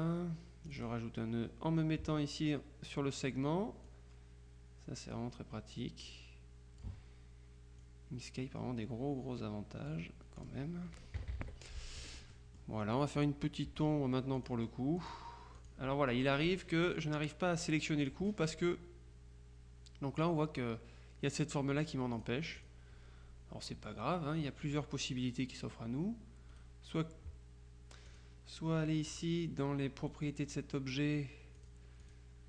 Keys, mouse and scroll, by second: 0.8 click, 4.3-5.7 drag, 6.2-7.4 drag, 7.9-11.0 drag, 11.3 KP_Subtract, 12.1 F1, 12.4-13.5 drag, 13.7 F2, 14.5 click, 15.4 click, 16.5 click, 22.2-23.3 drag, 26.6 right click, 28.1 middle click, 29.2 middle click, 29.5 click, 30.1 right click, 31.7 middle click, 31.8 click.